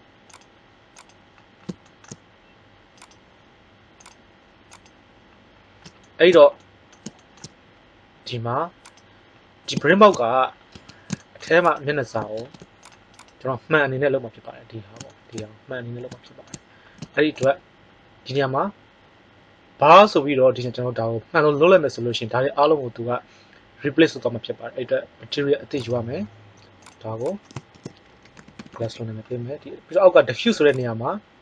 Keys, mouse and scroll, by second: 2.9-4.4 right drag, 8.8 right click, 9.4-9.8 right drag, 10.6 Tab, 12.3 ctrl+Tab, 28.6 s.